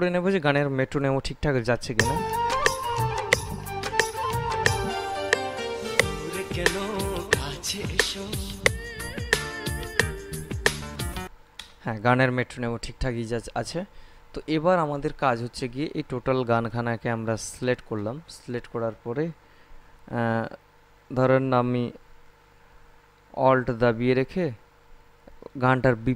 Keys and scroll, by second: 2.1 space, 11.4 space.